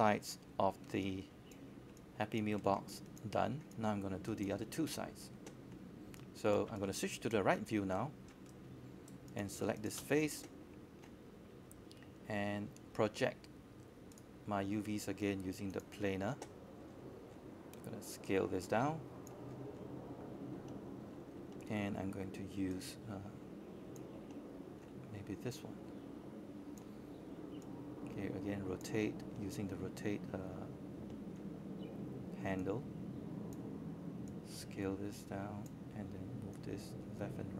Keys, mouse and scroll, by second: 3.9-5.9 scroll down 1, 8.2 q, 8.3 q, 8.7 right click, 10.3-11.7 drag, 12.0 typing, 13.3-15.7 drag, 16.4 w, 17.2-20.7 drag, 21.0-22.0 scroll down 1, 22.1 click, 22.7 scroll down 1, 24.3 scroll down 1, 24.3 space, 24.5 click, 25.5 alt+click, 26.0 alt+middle click, 26.9 alt+middle click, 27.2 alt+click, 28.1 alt+middle click, 28.5-29.5 scroll down 1, 30.1 alt+click, 30.2 space, 31.5 alt+middle click, 32.0 right click, 32.8 click, 33.3 shift+click, 36.0-37.5 scroll down 1.